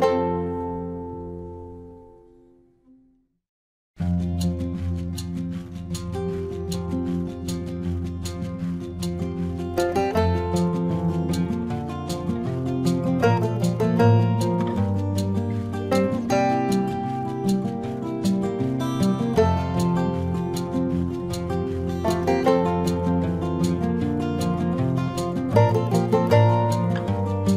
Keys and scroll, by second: 0.8 ctrl+alt+z, 2.0 ctrl+alt+z, 4.0 space, 5.7 space, 6.7 space, 8.1 space, 9.4 space, 11.1 ctrl+alt+z, 12.0 space, 13.6 ctrl+-, 16.7 space, 18.7 ctrl+=, 19.0 space, 22.6 space, 24.8 space, 26.1 space.